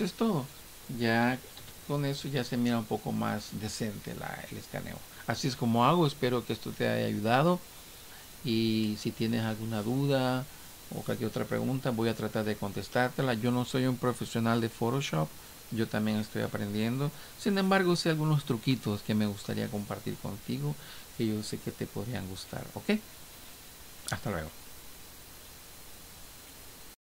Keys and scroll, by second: 1.6 ctrl+d.